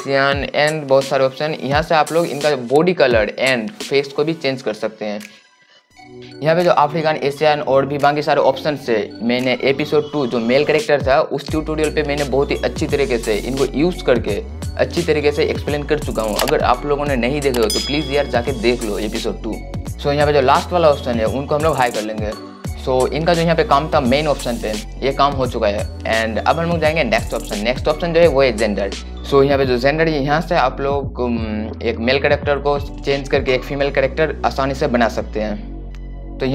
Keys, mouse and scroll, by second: 8.3 click, 21.2-36.5 drag.